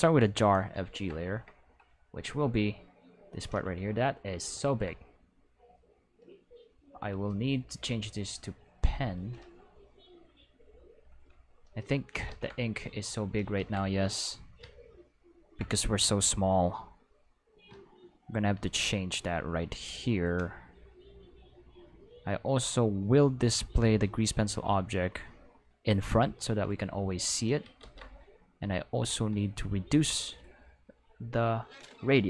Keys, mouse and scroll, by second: 0.0 click, 2.4-3.4 drag, 4.6 ctrl+z, 7.8 click, 9.1 click, 11.2 click, 12.2 ctrl+z, 12.6 click, 13.5 ctrl+z, 17.8 middle click, 19.3 click, 19.9 middle click, 20.7 middle click, 21.3 middle click, 23.3 click, 24.2 middle click, 24.9 click, 26.0 click, 26.7 click, 27.7 ctrl+z, 29.0 click, 29.9 click, 30.9 click.